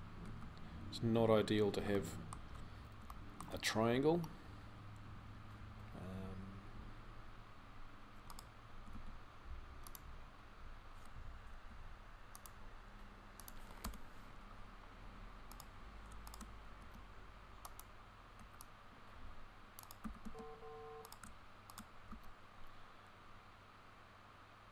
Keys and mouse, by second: 0.0 z, 1.9-3.0 middle drag, 8.5 g, 11.3 k, 16.6 x, 18.2 c, 19.9 f, 21.9 x.